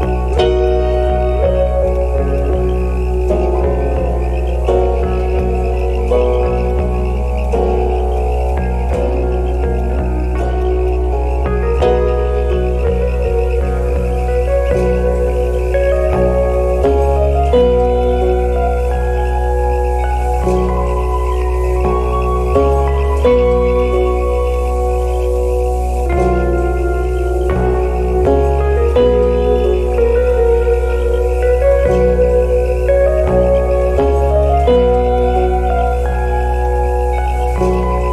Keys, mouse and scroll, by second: 0.4 shift+click, 0.6 alt+click, 1.8 shift+click, 2.3 alt+click, 5.3 shift+click, 6.1 shift+click, 7.4 alt+click, 8.5 shift+click, 9.1 shift+click, 10.9 alt+click, 17.6 alt+click, 22.2 scroll down 1, 23.3 right click, 25.7 scroll up 1, 28.5-28.9 scroll down 1, 30.4-31.0 scroll up 1, 31.2-31.5 scroll down 1, 33.2-33.5 scroll down 1, 34.8-35.1 scroll up 1, 35.1 right click, 37.1-37.6 scroll down 1.